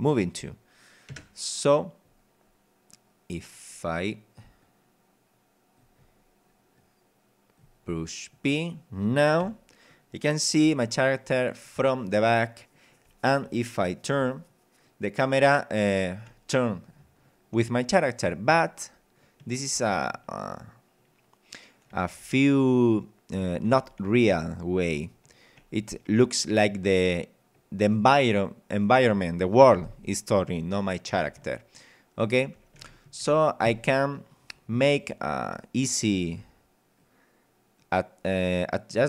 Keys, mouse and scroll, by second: 7.0 click, 7.9 scroll up 2, 9.0 scroll down 2, 9.4 p, 10.6 w, 13.4 d, 14.2 w, 18.6 d, 21.9 d, 24.4 w, 26.6 a, 29.8 a, 31.4 w, 32.6 d, 33.6 Escape, 37.0-38.0 drag.